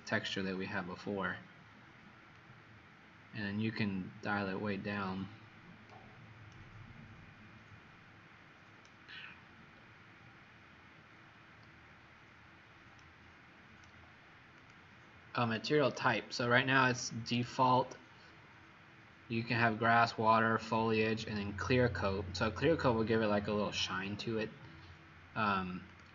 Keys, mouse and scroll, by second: 2.4 click, 6.4 right click, 9.7-10.2 scroll down 4, 10.9 scroll, 11.1 scroll up 1, 12.9 right click, 14.5 click, 15.8 click, 25.8 click.